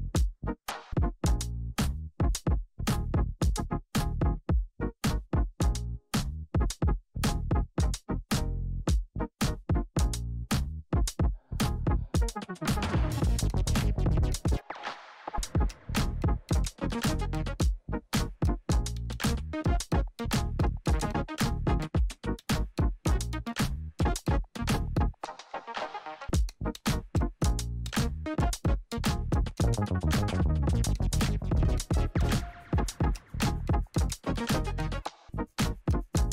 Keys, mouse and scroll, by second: 1.2-5.4 drag, 6.6 ctrl+d, 8.2-9.6 drag, 9.6 Return, 13.3-17.2 typing, 17.6 Return, 20.4 v, 22.2-25.5 drag, 27.0 p, 28.4 alt+click, 30.1 [, 31.3 ], 32.7 Left, 33.2-34.8 typing, 35.5 Return.